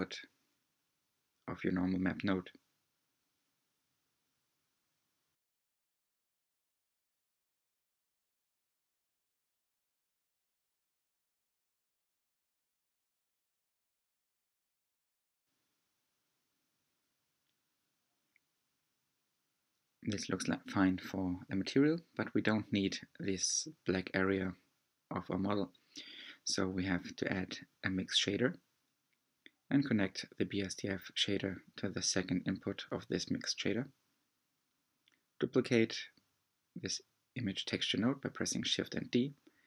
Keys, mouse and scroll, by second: 0.7-2.4 drag, 8.3 middle click, 8.9-9.4 scroll up 6, 9.4-10.6 shift+middle drag, 10.6-11.1 scroll up 4, 10.8-12.2 middle drag, 12.2-13.1 scroll down 11, 13.1-14.8 middle drag, 14.8-15.2 scroll down 6, 21.1 click, 21.8 g, 30.4 click, 34.5-35.7 scroll down 3, 35.7 click, 36.8 shift+d.